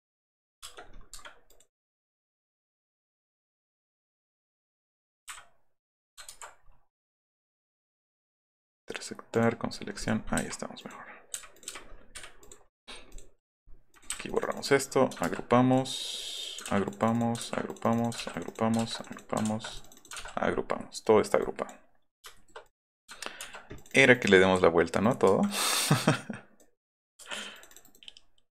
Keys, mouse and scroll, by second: 0.2 click, 0.6 space, 0.8 middle click, 1.1 Escape, 1.5 click, 1.8 click, 2.4 click, 2.5 click, 6.3 ctrl+z, 6.5 middle click, 6.6 middle click, 7.2 middle drag, 7.5 right click, 7.9 right click, 8.8 right drag, 9.3 right click, 10.0 click, 10.4 Delete, 10.8 click, 11.6 click, 11.6 Delete, 11.8 scroll down 1, 12.1 Escape, 12.4 click, 12.6 middle click, 12.9 middle drag, 13.1 middle click, 13.5-14.1 middle drag, 14.1 Delete, 14.8 scroll down 2, 16.7 g, 16.9 click, 17.0 click, 17.1 click, 17.6 click, 17.8 click, 18.0 click, 18.2 g, 18.3 click, 18.5 click, 19.0 click, 19.1 click, 19.5 ctrl+g, 20.1 ctrl+g, 20.2-20.6 scroll up 4, 20.8 middle click, 21.1 middle drag, 21.4 click, 22.3 shift+middle click, 22.6 click, 23.4 ctrl+k, 23.7 click, 23.9 click, 25.0 click, 25.5 click, 25.6 right click, 25.8 right click, 27.2 Escape, 27.5 click, 27.7 right click.